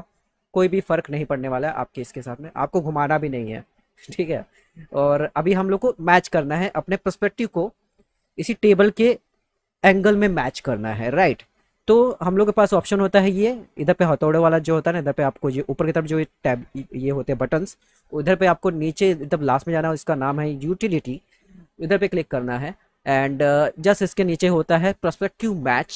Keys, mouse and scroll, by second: 2.3 ctrl+z, 4.3 click, 14.9 click, 21.7 click.